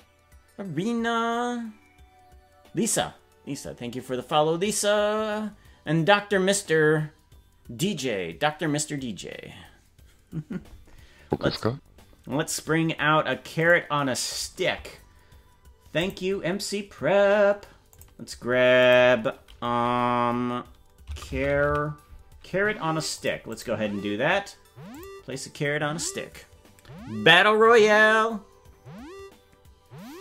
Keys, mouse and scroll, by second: 13.7 right click, 16.1 click, 17.9 click, 18.9-23.2 drag, 21.8 r, 23.5 click, 24.9 click.